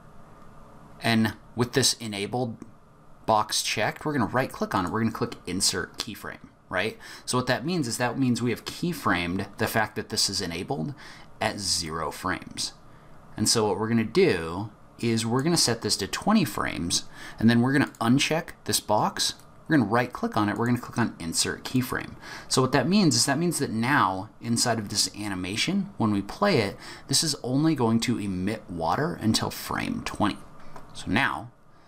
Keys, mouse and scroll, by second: 3.8 right click, 11.8 click, 17.8 click, 19.2 right click, 21.8 click.